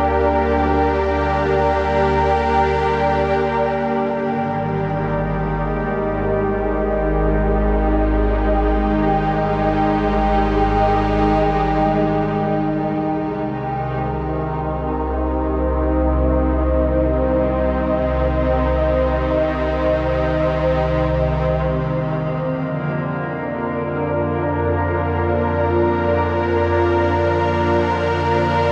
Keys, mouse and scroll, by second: 0.1 click, 2.1 shift+Up, 6.5-9.7 shift+drag, 14.0 right click, 14.8 click, 15.1 z, 15.4 click, 15.6 space, 15.7 click, 23.4 scroll up 1, 23.7-25.2 typing, 24.1 click, 24.6 click, 24.9 click, 25.3 click.